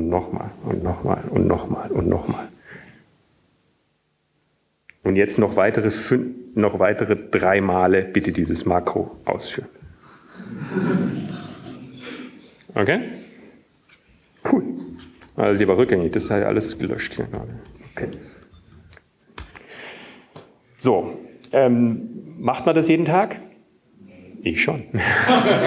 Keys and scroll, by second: 0.0 typing, 2.6-3.6 typing, 5.0-5.8 typing, 9.9 typing, 11.3-12.5 typing, 18.9 ctrl+/, 19.5 ctrl+/, 20.2 ctrl+/, 21.6 Up, 22.2 Up, 22.2 Down.